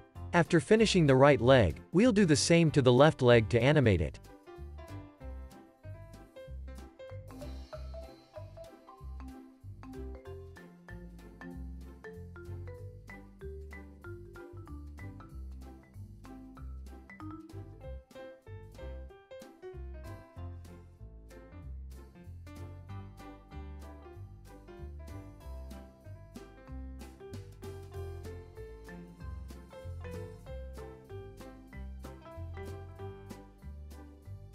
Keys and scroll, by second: 1.0 super+c, 5.8 alt+z, 7.2 x, 10.1 super+v.